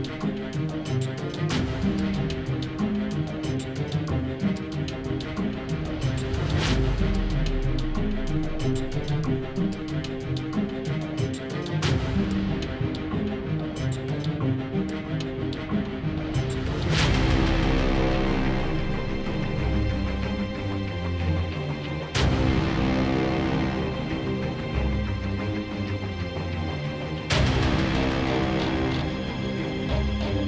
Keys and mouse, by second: 4.1 z, 4.4 shift+a, 5.1 ctrl+alt+KP_0, 6.0 shift+f, 8.7 shift+f, 9.3 shift+g, 9.5 shift+f, 11.0-14.6 typing, 14.9-30.4 drag.